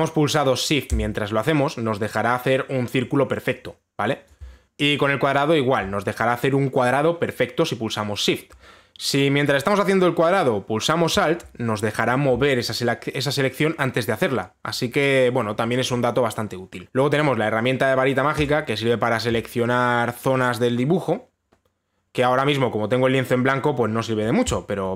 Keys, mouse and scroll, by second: 4.6 ctrl+z, 4.6 alt+click, 16.8 click, 19.1 click.